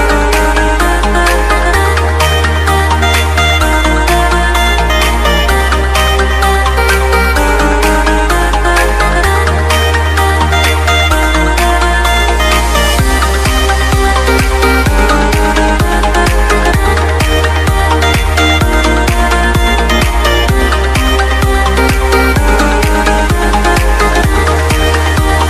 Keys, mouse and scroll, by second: 0.7 Return, 1.7 ctrl+a, 2.6 click, 3.7 ctrl+z, 4.9 ctrl+d, 7.0 alt+Num_Lock, 7.2 alt+Tab, 7.7 alt+Tab, 8.2 alt+click, 9.5-12.6 typing, 11.8 ctrl+a, 12.9 alt+click, 19.0-23.7 typing, 20.2 alt+Tab, 25.2 click.